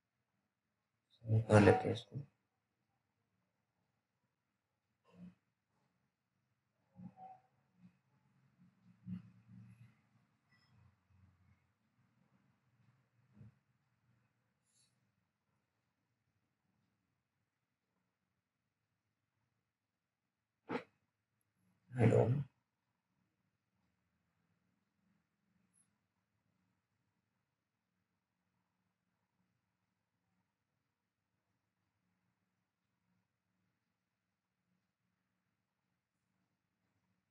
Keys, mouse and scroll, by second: 0.1 click, 0.2 click, 2.7 s, 3.5 click, 4.7-5.2 scroll down 1, 5.2 middle click, 6.2 click, 8.9 middle click, 9.7 click, 9.7 click, 11.1-11.7 scroll down 1, 11.9 click, 14.4-16.1 scroll down 1, 16.2 alt+middle click, 19.0-20.1 scroll down 1, 20.1 right click, 20.1 right click, 21.2 right click, 21.3 click, 22.5-23.0 scroll up 1, 23.0 right click, 24.6 click, 27.9 typing, 29.1 click, 29.4-30.7 scroll down 1, 30.7 click.